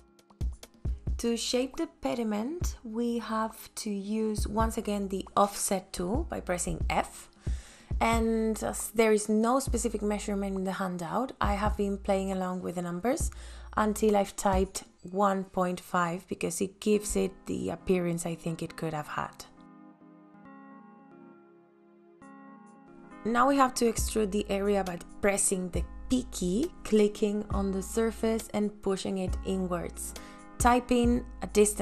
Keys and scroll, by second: 0.7 f, 9.3 ,, 9.4 KP_5, 10.0 KP_Enter, 13.5 ,, 14.2 KP_3, 14.5 KP_Enter, 17.1 ,, 17.3 KP_2, 17.4 KP_Enter, 19.4 ,, 20.9 KP_1, 21.2 KP_Enter, 24.8 p.